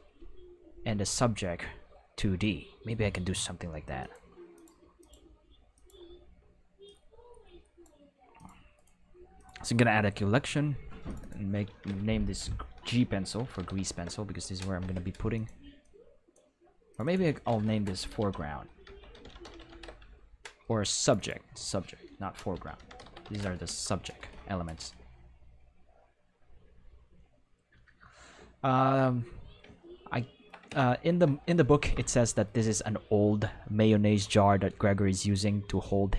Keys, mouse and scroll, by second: 3.9 click, 4.5 click, 4.9 click, 5.7 click, 6.8-7.8 drag, 8.3 click, 8.7 click, 8.7 right click, 9.3 click, 11.0 click, 11.1 click, 12.3-13.7 typing, 14.2 Return, 15.3 click, 15.8 click, 16.9 click, 17.0 click, 17.9-19.7 typing, 19.9 Return, 21.0 click, 21.1 click, 22.3-23.2 typing, 23.6 Return, 30.8 shift+middle click.